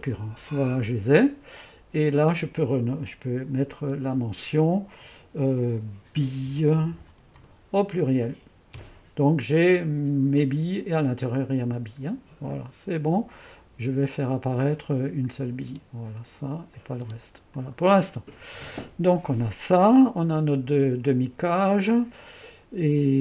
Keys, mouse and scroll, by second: 0.0-0.1 typing, 2.2-3.8 drag, 3.8 F2, 6.0-7.9 typing, 8.7 Return, 10.3 click, 12.5 click, 15.7 space, 17.1-19.7 typing, 18.2 middle click, 18.7-21.0 drag.